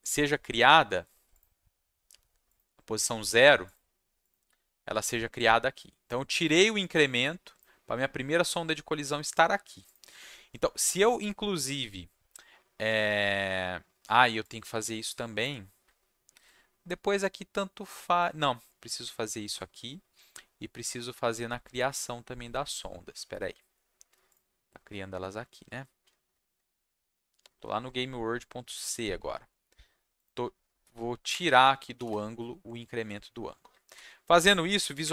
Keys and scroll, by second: 16.3 ctrl+c, 31.9 ctrl+v, 33.8 ctrl+shift+s, 35.0 Up.